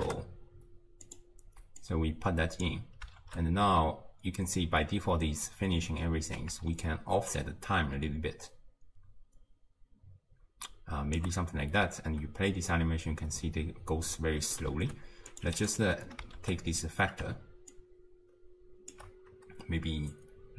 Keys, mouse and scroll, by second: 1.8 drag, 3.2 shift+space, 6.9-9.9 shift+drag, 11.9 space, 14.4 space, 15.3 click, 16.4 shift+space, 17.8-20.5 shift+drag.